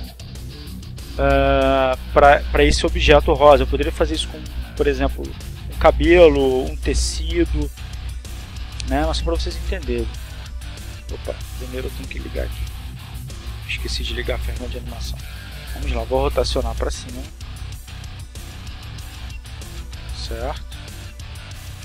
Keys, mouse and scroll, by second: 2.1-5.0 drag, 5.5 click, 7.8 click, 9.8 r, 12.0 click, 14.3 right click, 16.8 r, 17.6 click, 18.3 right click, 19.0 r, 20.0 click.